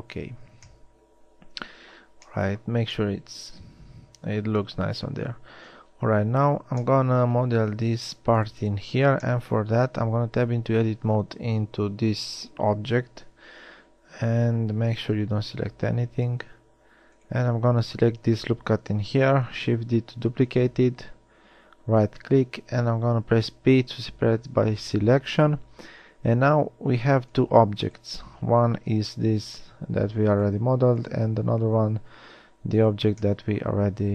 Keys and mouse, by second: 2.5-3.2 middle drag, 3.4 middle click, 4.9 middle click, 6.1 Tab, 6.2 KP_1, 10.4 Tab, 15.1 a, 15.3 a, 15.9 a, 19.7 shift+d, 23.9 p, 26.4 Tab, 29.2 g, 31.9 g.